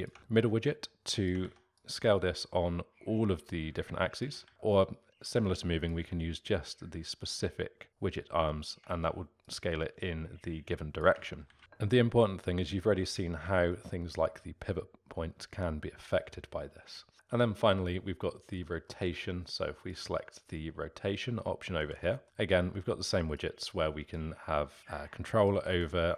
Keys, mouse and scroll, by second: 0.2 ctrl+z, 0.6 click, 1.4 ctrl+z, 1.7-4.4 drag, 4.4 ctrl+z, 4.7-11.3 drag, 11.3 ctrl+z, 11.5 ctrl+z, 13.7-16.7 alt+middle drag, 18.8-19.8 middle drag, 19.8 click, 21.4-23.4 middle drag, 23.4-25.7 drag, 25.7 ctrl+z.